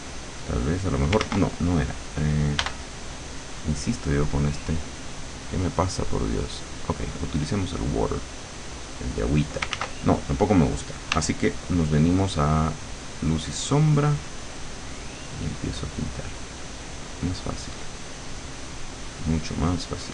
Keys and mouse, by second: 0.1 click, 1.3 ctrl+z, 2.6 b, 4.2-5.2 drag, 6.7 click, 8.0 click, 9.8 ctrl+z, 11.2 w, 14.2-20.1 drag.